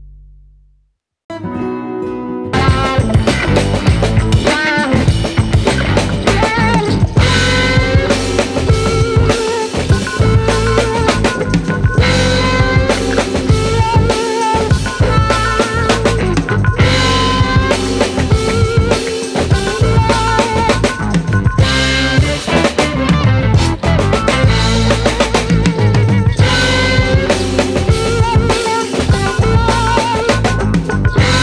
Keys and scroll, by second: 20.8 ctrl+shift+], 21.5 Up, 21.6 Up, 23.1 Right, 29.5 Down, 31.3 Up.